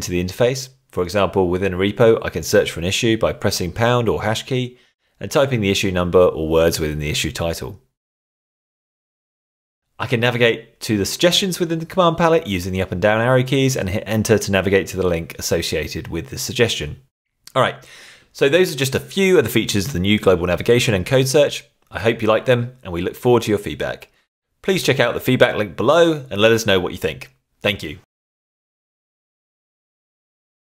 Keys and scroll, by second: 0.7 shift+3, 1.1 1, 2.3-4.1 typing, 5.7-9.7 typing, 10.8 Down, 12.0 Up, 15.8 Return.